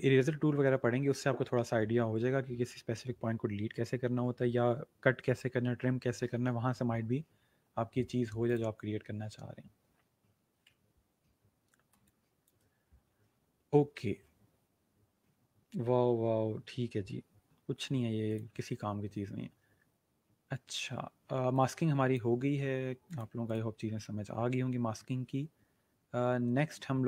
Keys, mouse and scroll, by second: 8.4 click, 11.9 space, 12.0 click, 12.6 space, 18.3 click, 21.5 click.